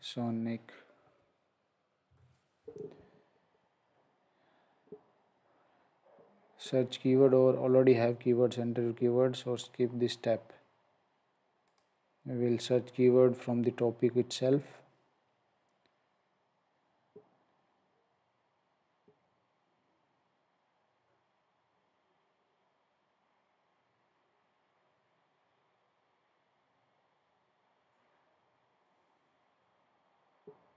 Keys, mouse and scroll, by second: 0.0-0.2 typing, 2.1 shift+?, 9.8 shift+?, 10.0-10.4 scroll down 1, 11.7 click.